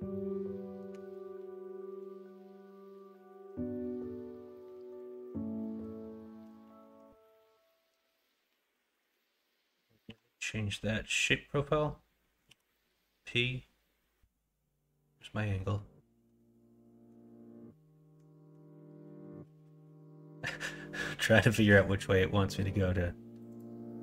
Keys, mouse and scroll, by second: 0.9 g, 6.8 ctrl+b.